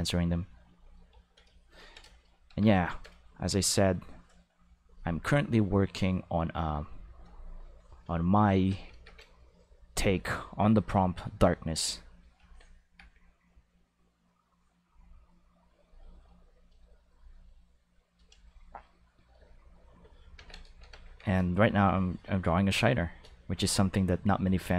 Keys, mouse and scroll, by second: 0.1 click, 0.6 click, 2.7 a, 3.3 r, 4.3 right click, 7.2 click, 8.5 Tab, 8.8 a, 9.5 r, 10.3 a, 11.8 r, 12.4 Tab, 12.8 a, 13.4 r, 15.8 click, 16.0 g, 16.5 click, 16.7 r, 17.1 click, 17.5-18.1 shift+middle drag, 18.3 g, 19.2 click, 19.8 Tab, 20.3 ctrl+s, 20.8 Tab, 21.0 a, 21.8 r, 22.9 click, 23.5 Tab.